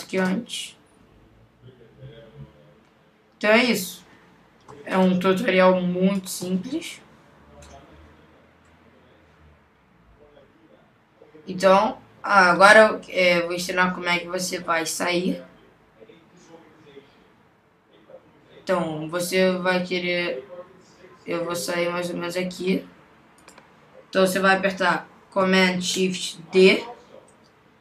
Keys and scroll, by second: 26.8 shift+super+d.